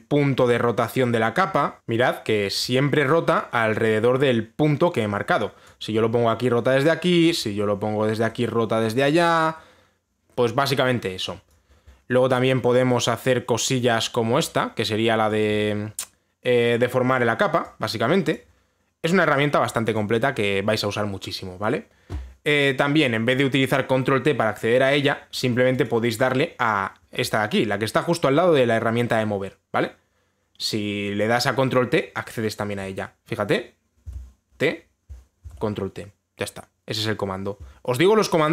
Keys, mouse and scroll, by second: 1.0 click, 1.8 ctrl+z, 1.9 click, 6.3 click, 7.9 click, 12.1 click, 15.9 click, 19.0 click, 20.6 click, 26.5 click, 26.9 click, 34.7 t, 36.0 ctrl+t.